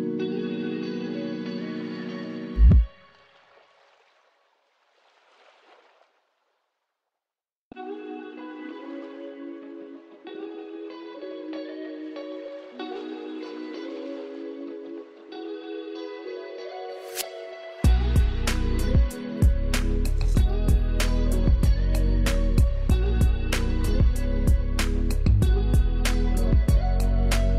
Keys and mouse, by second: 5.9 ctrl+alt+z, 7.2 ctrl+Return, 7.5 ctrl+alt+z, 8.8 ctrl+click, 9.1 ctrl+z, 10.6 ctrl+t, 11.9-17.0 ctrl+drag, 17.9 ctrl+space, 18.1 ctrl+click, 18.3 ctrl+space, 19.8-23.5 drag, 23.5 ctrl+Return, 24.1 ctrl+[.